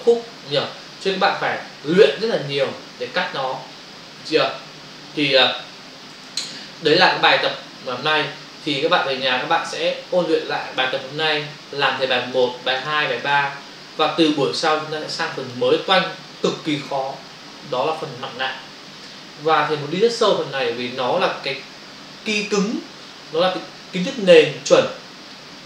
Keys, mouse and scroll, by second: 3.2 Right, 5.3 Escape, 7.9 click, 8.1 click, 12.3 click, 12.5 click, 12.8 click, 12.9 click, 13.2 click, 13.3 double click, 14.5 click.